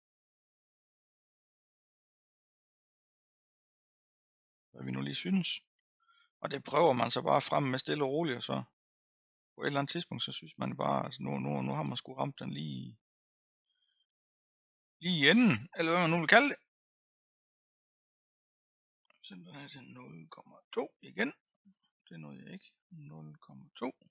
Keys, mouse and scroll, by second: 0.0-1.3 drag, 1.3-2.6 middle drag, 2.6-4.1 drag, 4.1 middle click, 4.7-5.3 scroll down 1, 5.3-7.6 drag, 7.6 middle click, 8.4-11.6 drag, 11.6-14.6 middle drag, 14.9-17.9 drag, 20.0 KP_0, 20.3 ., 20.7 KP_2, 22.1-24.1 drag.